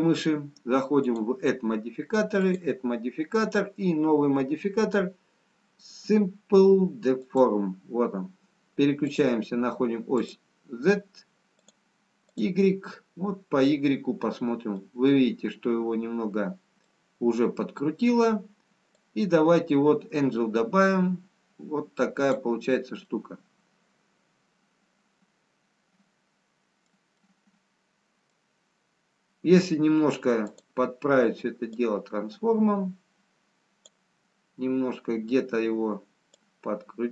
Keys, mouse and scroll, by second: 2.1 click, 2.7 click, 9.0 click, 12.0 click, 13.6 scroll down 2, 14.9 middle click, 20.0 click, 23.4 middle click, 28.5 middle click, 30.6 click, 32.1 click, 36.8 click.